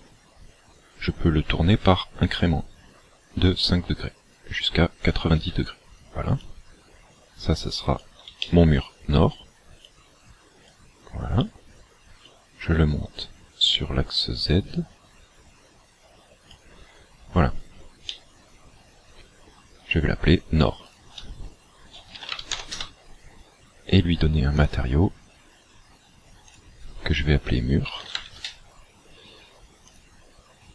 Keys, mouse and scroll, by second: 5.1 ctrl+click, 6.4 click, 8.6 shift+middle click, 9.9 click, 12.2 click, 18.1 middle click, 20.9 ctrl+click, 24.7 click, 29.9 click.